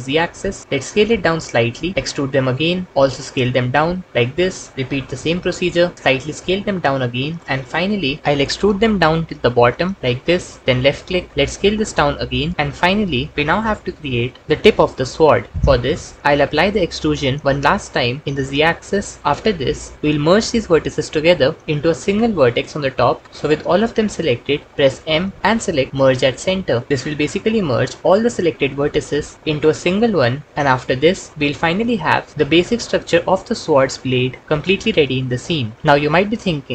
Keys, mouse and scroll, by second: 1.1 s, 1.9 e, 3.5 s, 4.4 click, 4.9 e, 5.9 s, 8.2 ctrl+z, 8.3 e, 10.0 z, 11.5 s, 16.7 e, 24.6 m, 30.8 KP_1.